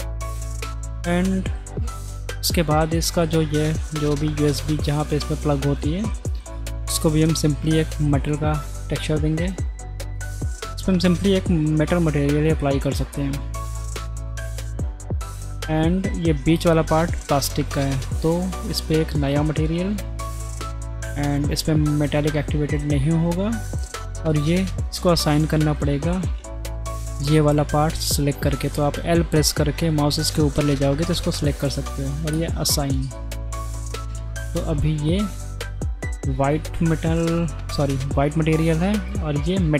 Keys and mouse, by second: 1.5 shift+drag, 5.8-6.1 shift+drag, 6.3 click, 7.7-8.2 drag, 8.3 click, 9.6 click, 11.4-12.5 drag, 13.9 click, 15.2 middle drag, 18.1 click, 20.6 click, 23.2 middle click, 24.7 Tab, 27.3 l, 28.6 l, 32.4 click, 33.3 click, 34.1 Tab, 35.7 click, 39.1 click.